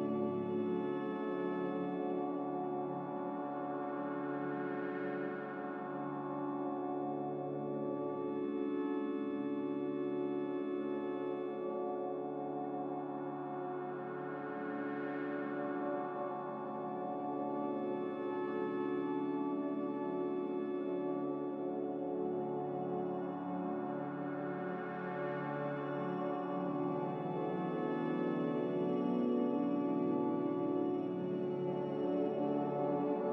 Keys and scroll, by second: 0.0 typing, 0.3 Return, 3.6 a, 5.4 typing, 5.9 Return, 18.1 1, 19.5 typing, 19.7 Return, 23.2 ctrl+c.